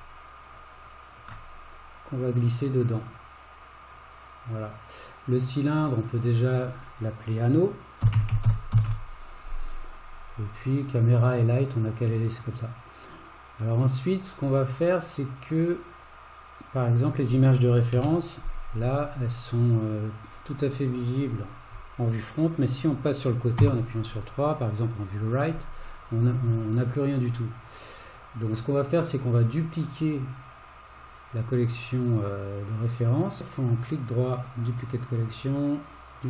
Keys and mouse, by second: 1.2 shift+click, 1.8 click, 4.0 click, 5.2 click, 5.6-10.6 drag, 8.3 n, 18.0 KP_1, 23.6 KP_3, 31.0-34.5 right drag, 35.9 click.